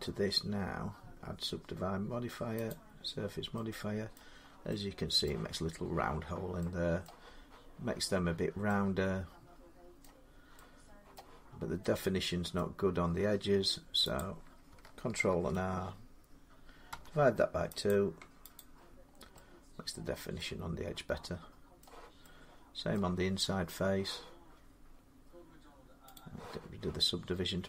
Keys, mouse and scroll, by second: 2.5 click, 4.0 middle click, 4.2 scroll down 4, 5.1 middle click, 6.9 middle click, 9.3 middle click, 9.8 middle click, 10.2 scroll, 10.9 scroll down 2, 11.2 middle click, 12.0 scroll up 2, 12.7-14.0 scroll up 4, 14.0 click, 15.1 ctrl+r, 16.7 2, 17.7 click, 18.4 click, 18.9 middle click, 19.1 middle click, 20.0 middle click, 20.7 scroll up 4, 21.6 middle click, 22.8 middle click, 23.1-23.6 scroll, 23.3 middle click, 26.0 middle click, 26.0 click, 26.7 middle click.